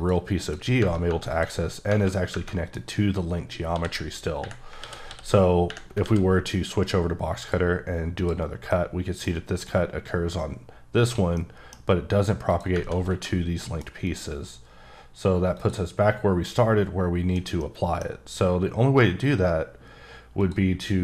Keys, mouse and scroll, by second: 0.4 click, 1.3 click, 1.7 scroll up 2, 2.5 middle click, 2.8 scroll up 2, 3.7 d, 4.8 alt+w, 5.0 d, 6.0 alt+w, 6.8 click, 8.2 click, 8.4 scroll down 3, 8.7 middle click, 9.6 click, 11.4 middle click, 12.5 click, 13.6 middle click, 14.1 click, 15.5 click, 17.6 middle click, 20.4 click.